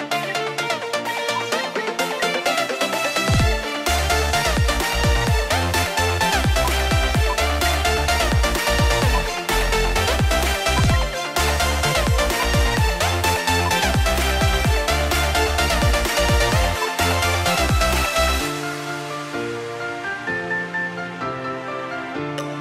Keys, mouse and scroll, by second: 0.1 shift+Left, 0.9 4, 1.7 shift+Delete, 2.0 4, 2.1 Return, 4.1-4.5 scroll down 1, 5.0 F2, 6.5 ctrl+z, 8.4 double click, 9.1 ctrl+z, 12.5 ctrl+k, 13.6 ctrl+k, 16.2 double click, 16.8 ctrl+z.